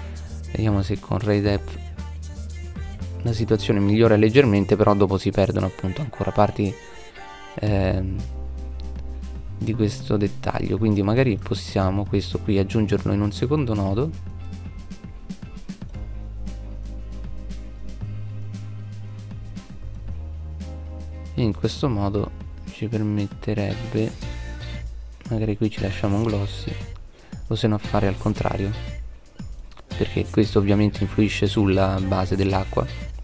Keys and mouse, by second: 0.7 middle click, 13.4 shift+d, 21.9 shift+a, 30.6 right click.